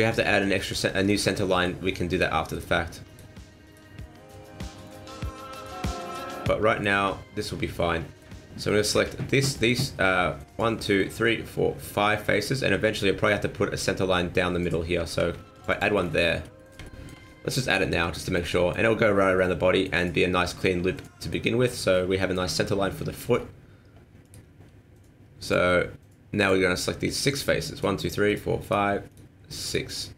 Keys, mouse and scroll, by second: 0.2-1.0 scroll up 2, 0.4 middle click, 1.0 shift+middle click, 1.2 scroll up 1, 1.4 middle click, 2.1 right click, 2.5 shift+right click, 3.1 right click, 3.6 right click, 4.0 middle click, 4.8 shift+right click, 5.6 shift+right click, 6.0 shift+right click, 6.4 middle click, 7.8 middle click, 8.6 middle click, 15.2 ctrl+r, 16.0-16.6 scroll down 4, 16.6 middle click, 16.8 shift+middle click, 17.2 scroll down 2, 17.5 middle click, 18.1 shift+middle click, 18.5 middle click, 19.4 middle click, 19.6 shift+middle click, 20.4 shift+middle click, 21.0 middle click, 21.4 middle click, 21.9 scroll up 4, 22.2 shift+middle click, 22.4 shift+scroll down 1, 22.5 middle click, 22.8 shift+middle click, 23.2-24.2 scroll up 4, 24.2 right click, 25.4 click, 26.4 click, 26.8-27.4 scroll up 1, 27.4 right click, 27.4-27.8 scroll up 1, 27.8 shift+right click, 28.3 shift+right click, 28.6 shift+right click, 29.1 shift+right click, 29.6 right click, 30.0 middle click.